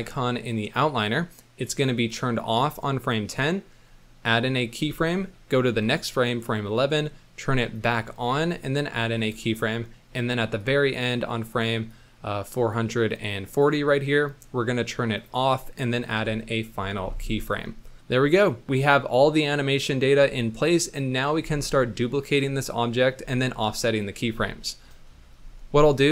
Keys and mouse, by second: 1.9 click, 4.8 i, 5.7 Right, 7.7 click, 8.8 i, 10.6 click, 11.9 click, 16.1 i, 21.7 middle drag, 24.9 middle drag.